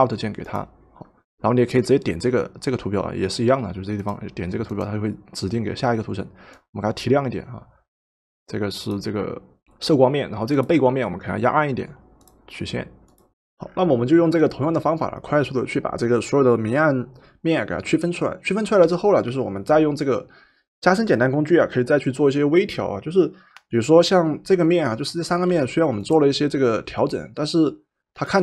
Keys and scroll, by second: 25.6 v.